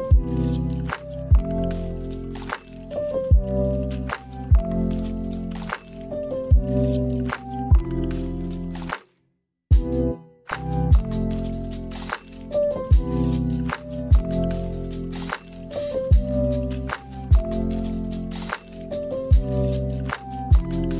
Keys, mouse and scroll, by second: 1.2 shift+a, 10.4 click, 12.0 0, 15.3 click, 17.3 click, 19.8 click.